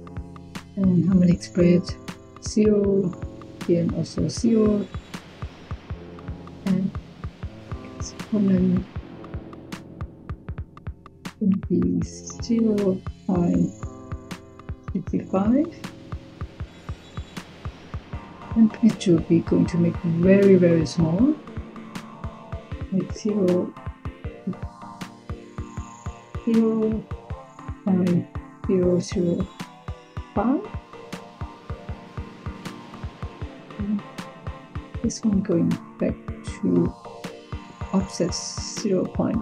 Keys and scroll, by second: 12.4-12.9 typing, 14.3-15.0 typing, 22.7-23.4 typing, 24.7 BackSpace, 26.1 typing, 27.3-28.7 typing, 29.8-30.5 typing.